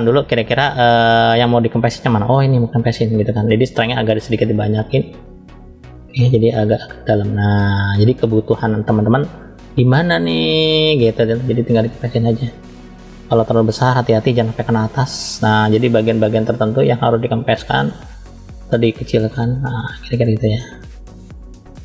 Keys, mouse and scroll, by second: 1.9 click, 3.7 click, 3.9 click, 4.9 click, 6.1 click, 7.9-8.5 scroll down 1, 8.5 scroll down 1, 9.1 shift+middle click, 9.1-9.7 scroll up 1, 9.9-10.3 scroll up 1, 10.3 click, 13.0 f, 14.4 click, 21.6 scroll up 1, 21.6 middle click.